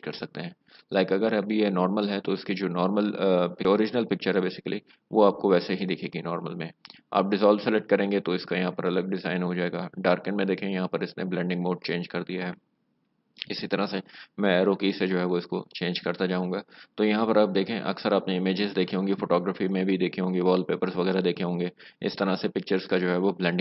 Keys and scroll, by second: 15.6 Down.